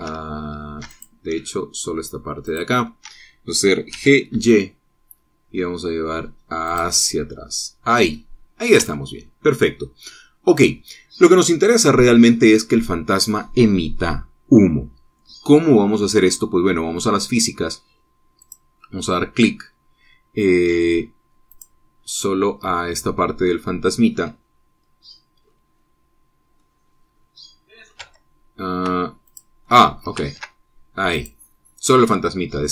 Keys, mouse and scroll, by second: 1.7 shift+click, 3.3 shift+click, 4.7 g, 5.1 y, 7.5-9.7 drag, 9.7 Tab, 10.2 scroll down 1, 10.3-11.5 drag, 19.3 click, 21.5-21.8 scroll up 1, 22.3 click, 23.0-24.2 middle drag, 27.4-28.8 drag, 28.8 Tab, 29.7 Tab, 30.1 click, 30.5 middle click, 30.5 click, 31.1 ctrl+Tab, 31.9 click.